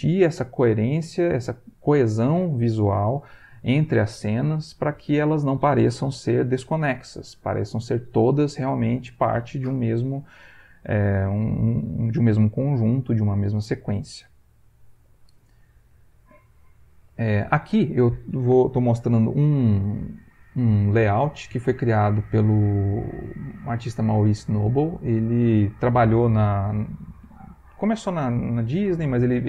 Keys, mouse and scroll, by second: 16.6 click.